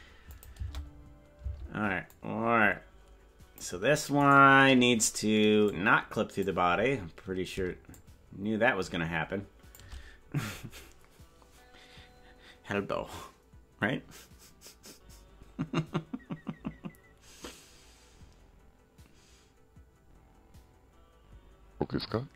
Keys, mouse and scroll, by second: 0.4 click, 0.8 space, 1.5 space, 2.2-3.7 drag, 4.3 right click, 5.7 click, 7.9-9.8 shift+drag.